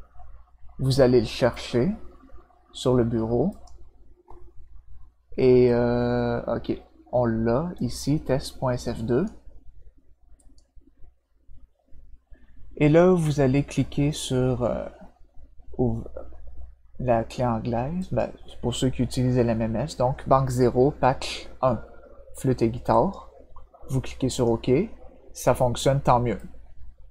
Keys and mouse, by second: 1.5 click, 3.5 click, 7.7-9.2 drag, 10.3 click, 18.0 click, 22.9 click, 24.2 click, 26.3-27.1 drag.